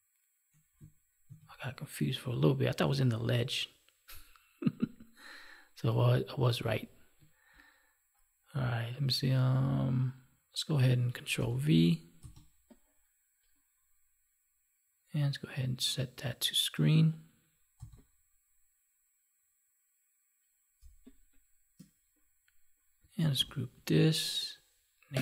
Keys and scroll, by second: 1.1 ctrl+d, 11.3 ctrl+v, 20.7 space, 23.3 ctrl+g.